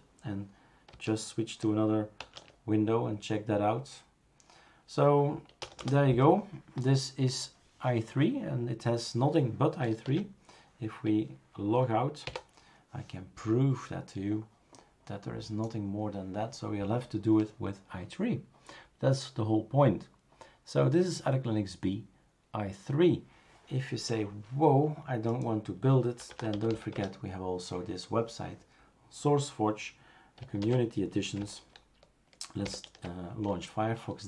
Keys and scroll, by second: 2.4 super+&, 5.6 BackSpace, 5.8 BackSpace, 10.1 super+x.